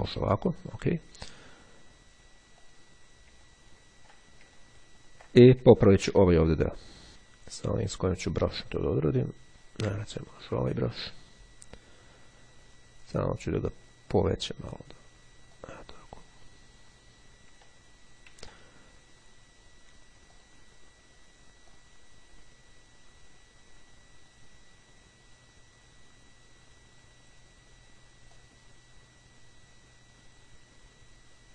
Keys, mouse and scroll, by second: 0.7 click, 2.8 click, 9.5 click, 13.6 click, 15.6 click, 17.8 ctrl+z, 20.4 click, 21.8-27.9 drag, 28.4-31.5 drag.